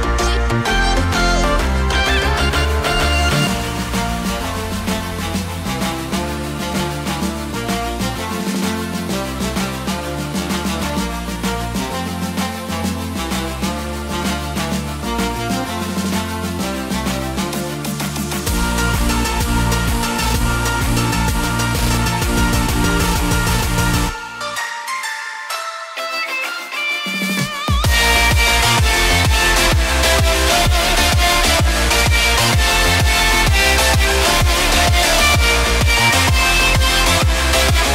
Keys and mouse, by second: 0.1 click, 1.1 click, 2.8 click, 3.8 click, 5.6 click, 6.2 space, 7.3 click, 12.4 space, 13.0 click, 13.6-14.0 middle drag, 14.8-16.8 middle drag, 17.5 s, 17.7 y, 19.4 g, 19.7 y, 24.2-24.9 middle drag, 32.5-37.9 drag.